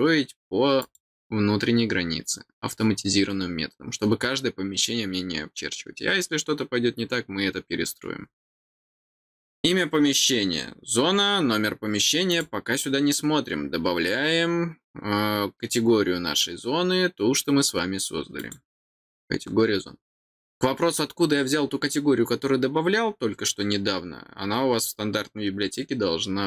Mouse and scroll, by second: 0.8 click, 12.3 click.